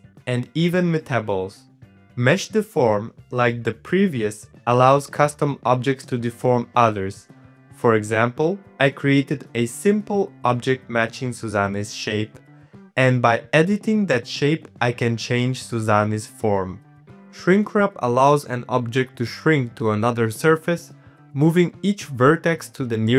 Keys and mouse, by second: 0.2 Tab, 0.2 middle click, 0.5 middle click, 1.1-2.7 shift+drag, 3.4 click, 4.1 click, 5.1 click, 5.7 middle click, 6.1 click, 6.4 click, 7.2 click, 8.1 Tab, 8.4 1, 8.4 click, 8.7 g, 9.6 KP_1, 10.0 shift+middle click, 10.2 click, 10.3 KP_1, 11.2 shift+middle click, 12.4 shift+click, 12.5 shift+middle click, 12.7 click, 13.7 middle click, 13.9 Tab, 14.3 Tab, 14.3 click, 15.2 click, 15.2 g, 15.4 g, 15.6 Tab, 15.6 middle click, 16.1 click, 16.9 middle click, 17.8 middle click, 18.2 click, 18.4 click, 18.8 click, 19.5 middle click, 19.7 middle click, 19.9 z, 20.1 shift+middle click, 20.6 shift+middle click, 20.9 z, 21.2 middle click, 21.7 click, 22.1 click, 22.5 middle click, 22.7 middle click, 22.9 z.